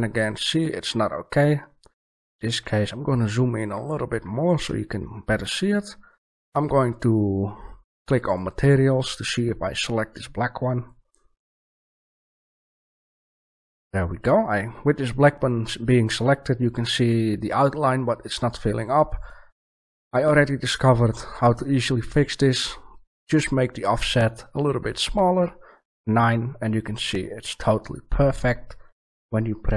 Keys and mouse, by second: 1.9 middle click, 2.4-2.9 middle drag, 3.7 middle click, 3.9 middle click, 4.7-5.5 middle drag, 10.7 right click, 19.1-21.3 drag, 24.9 click, 25.3-26.6 middle drag, 26.6 drag, 27.7 middle click.